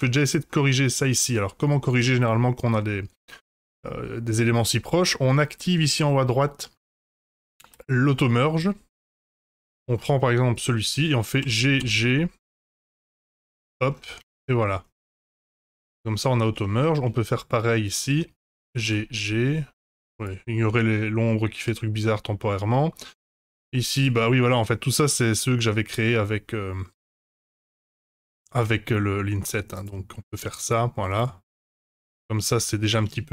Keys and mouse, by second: 0.0 1, 7.7 click, 10.5 click, 11.3 g, 14.4 Tab, 15.1 Tab, 16.6 shift+click, 18.6 g, 21.7 middle click, 24.8 middle click, 27.9 g, 31.6 middle click, 32.1 Tab, 33.0 Tab.